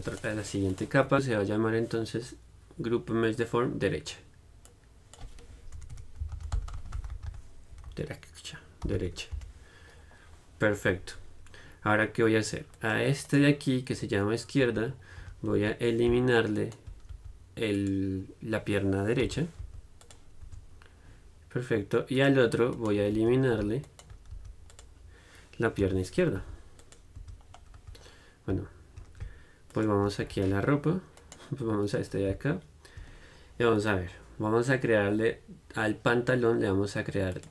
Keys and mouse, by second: 0.3 middle click, 6.1 BackSpace, 13.0 click, 13.5-15.4 middle drag, 15.4 z, 15.7 Tab, 16.7-18.9 right drag, 17.3 x, 19.4 l, 19.8 x, 20.6 Tab, 22.4 click, 23.4 Tab, 24.5 x, 26.0 l, 26.6 x, 27.4 Tab, 27.9 click, 28.0 z, 29.9-31.4 drag, 30.5 z, 31.4 right click, 32.3-37.5 middle drag.